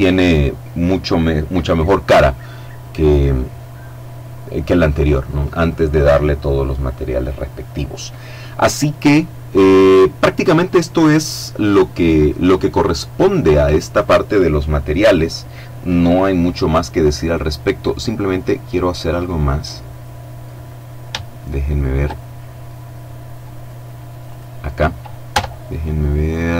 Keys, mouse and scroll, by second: 16.8-17.2 scroll down 2, 17.2 middle click, 19.1 middle click, 19.8-20.7 scroll up 3, 20.7 shift+middle click, 21.3 shift+middle click, 22.1-22.6 scroll up 1, 22.6 click, 23.0-23.4 scroll up 1, 23.4 right click, 24.4 Tab, 26.2-26.5 drag.